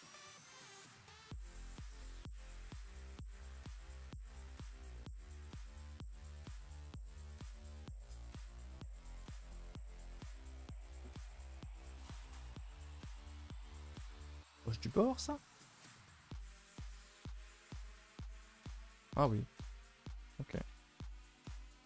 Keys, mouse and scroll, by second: 0.0-0.5 typing, 2.4 click, 2.9 h, 3.0 u, 4.3 g, 4.5 y, 4.9 Escape, 5.1 click, 5.6 click, 5.8 click, 6.3 click, 6.9 g, 8.5 middle click, 9.5 middle click, 10.4-10.9 scroll up 2, 10.9-11.4 scroll down 8, 11.4 middle click, 12.0 scroll up 4, 12.3 middle click, 12.4 middle click, 12.8 middle click, 13.5 click, 13.9 3, 14.0 click, 14.8 g, 16.6-17.3 scroll up 4, 17.3 KP_0.